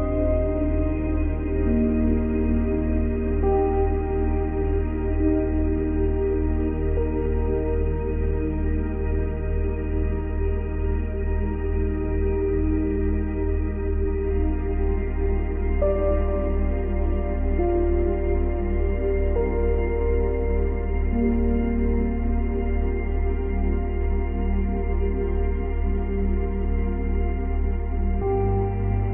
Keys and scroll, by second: 14.8 ctrl+c, 15.0 ctrl+v, 15.9 ctrl+v.